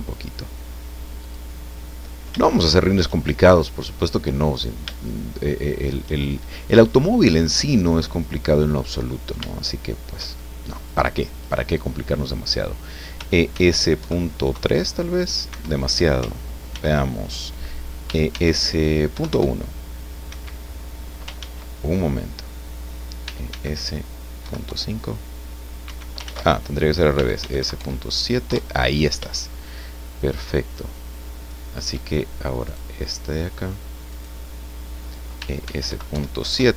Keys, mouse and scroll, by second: 1.2 click, 1.5 middle click, 3.5 middle click, 4.6-4.9 scroll up 2, 5.0-6.2 shift+middle drag, 7.9-9.0 middle drag, 9.1 scroll down 2, 9.5 shift+middle click, 10.8 right click, 11.4 right click, 13.2 e, 13.5 s, 14.0 KP_Decimal, 14.5 KP_3, 15.5 Escape, 16.7 ctrl+z, 18.0 e, 18.3 s, 19.1 KP_Decimal, 19.3 KP_1, 20.3 Escape, 21.4 ctrl+z, 23.2 e, 23.5 s, 24.4 KP_Decimal, 24.6 KP_5, 25.8 Escape, 26.2 ctrl+z, 27.1 e, 27.4 s, 27.6 KP_Decimal, 27.8 KP_7, 28.4 KP_Enter, 30.0-31.9 shift+drag, 32.6 right click, 33.0 middle click, 34.1 right click, 35.4 e, 35.7 s, 35.9 KP_Decimal, 36.1 KP_7, 36.4 KP_Enter.